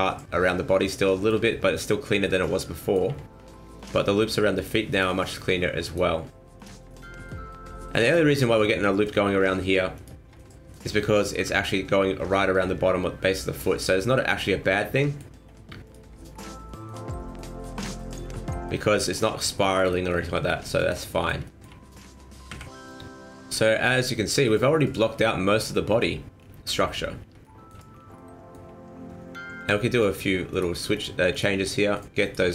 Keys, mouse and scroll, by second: 0.1 scroll down 3, 0.8 scroll down 1, 1.1 shift+middle click, 1.4 scroll down 1, 1.6 middle click, 2.2 middle click, 2.4 shift+middle click, 2.8 shift+middle click, 3.4-3.8 scroll up 2, 3.8 alt+right click, 4.2 alt+right click, 4.6 alt+right click, 4.9 alt+right click, 5.2 alt+right click, 5.8 alt+right click, 6.6 alt+right click, 6.8 middle click, 7.6-8.3 shift+scroll up 2, 7.8 shift+middle click, 8.4 middle click, 8.8-10.0 scroll up 1, 10.0 middle click, 10.0 alt+right click, 10.3 scroll down 3, 10.5 middle click, 11.1 middle click, 11.4 scroll up 2, 13.6 scroll down 2, 13.7 middle click, 14.1 shift+middle click, 14.4 scroll up 2, 14.7 middle click, 15.8 alt+right click, 16.2 middle click, 16.5 scroll down 2, 16.6 middle click, 17.0-17.4 scroll up 2, 17.2 middle click, 17.4 alt+right click, 17.6 middle click, 17.6 scroll down 1, 18.0 middle click, 18.2-18.7 scroll down 2, 18.5 middle click, 19.2 scroll up 2, 19.6 shift+middle click, 19.8-20.3 shift+scroll down 8, 20.3 middle click, 20.7 shift+middle click, 21.1 middle click, 21.4 shift+middle click, 22.5 KP_1, 23.7-24.2 scroll up 3, 24.2 shift+middle click, 24.4 scroll down 4, 25.1 scroll down 3, 25.6-26.0 scroll up 3, 26.0 scroll down 2, 26.4-27.3 scroll up 7, 27.4 shift+middle click, 27.9-28.4 scroll up 2, 28.2 middle click, 28.8 scroll up 1, 29.6 click, 30.5 right click, 30.9 shift+right click, 31.3 right click, 31.6 scroll down 2, 32.2 shift+right click.